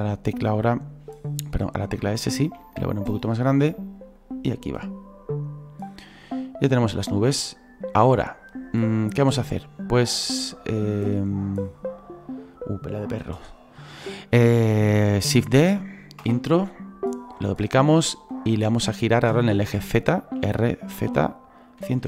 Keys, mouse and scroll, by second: 1.4-2.4 drag, 1.4 scroll up 1, 2.4 s, 4.2-9.1 drag, 10.5 click, 11.1-15.6 drag, 11.8 scroll down 4, 12.3-13.9 scroll up 2, 14.0-15.6 shift+middle drag, 15.6 shift+d, 17.2-20.4 drag, 20.4 r.